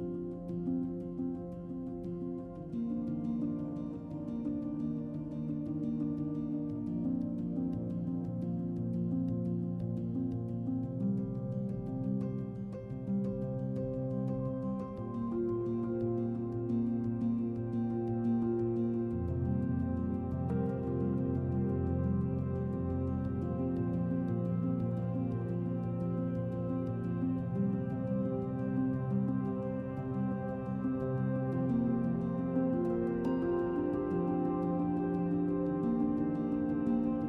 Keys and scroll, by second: 13.5 z, 15.2 z, 18.0 z, 24.7 g, 27.6 ctrl+alt+1, 32.7 b.